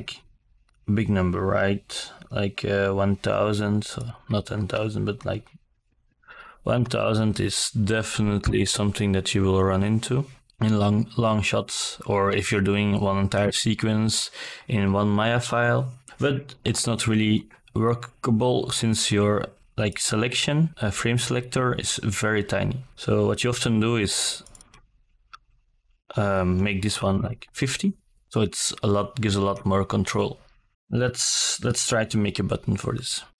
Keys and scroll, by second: 2.3 KP_1, 2.6 KP_0, 3.7 Return, 23.5 KP_5, 23.6 KP_0, 23.8 Return.